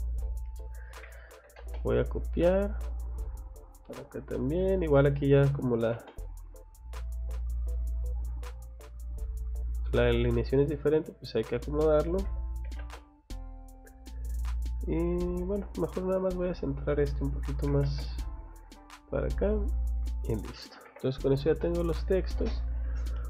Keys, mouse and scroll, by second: 0.1 click, 1.0 c, 1.4 o, 1.6 space, 2.1 click, 2.4 scroll down 1, 3.6 click, 3.9 Escape, 4.2-4.6 scroll up 1, 4.6 click, 5.4 r, 5.8 o, 6.0 space, 6.3 click, 10.6 click, 11.2 click, 11.4 click, 12.3 c, 12.6 o, 12.8 space, 13.0 click, 13.2 scroll down 1, 14.7 scroll up 1, 15.4 Escape, 16.1 click, 16.4 click, 17.7 m, 17.8 space, 18.0 scroll up 2, 18.5 click, 19.8 click, 20.1 scroll down 1, 20.5 middle click, 20.9 Escape, 21.6 middle click, 21.8 space, 22.9-23.2 scroll up 2.